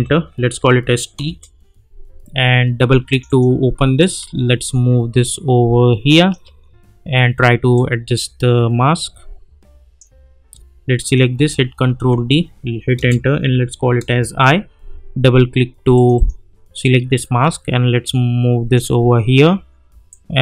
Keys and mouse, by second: 0.6 t, 1.2 Return, 3.1-11.0 drag, 11.8 ctrl+d, 12.9 Return, 13.5 i, 14.0 Return, 15.9-20.1 drag, 20.1-20.4 drag.